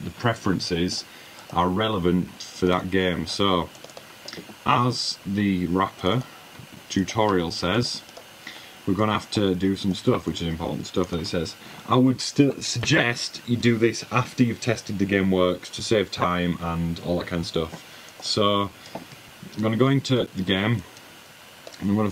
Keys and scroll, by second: 5.4 super+w, 18.3 super+`.